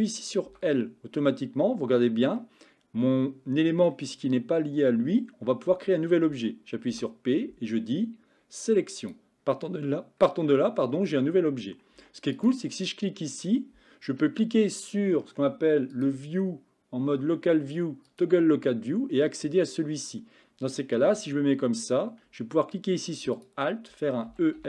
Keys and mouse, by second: 0.5 l, 2.5-4.0 middle drag, 6.9 p, 10.5 middle click, 12.0 Tab, 16.0-18.3 drag, 18.9-19.7 middle drag, 21.0 Tab, 24.4 e.